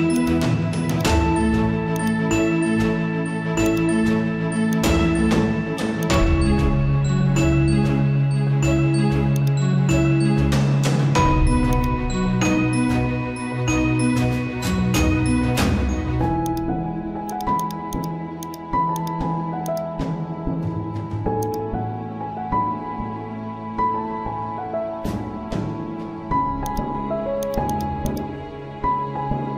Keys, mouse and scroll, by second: 7.3 scroll up 1, 9.0 right click, 9.3 click, 10.7-11.5 typing, 11.7-14.4 drag, 14.4 scroll down 1, 14.4 typing, 16.4 click, 26.6 click, 26.6 typing, 28.8 scroll down 1.